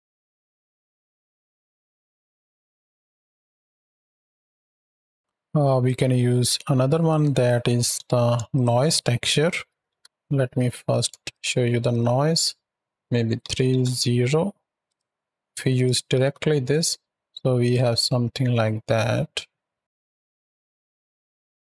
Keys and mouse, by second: 1.2 space, 1.5 space, 2.3 click, 4.8 space, 5.0 shift+Right, 5.1 shift+Left, 5.7-6.9 drag, 7.6 drag, 8.0 shift+a, 10.6 click, 12.9 click, 14.7 drag, 14.9 x, 15.0 click, 16.0 shift+Right, 16.1 shift+Left, 17.1 click, 17.7 space, 21.0 shift+Left.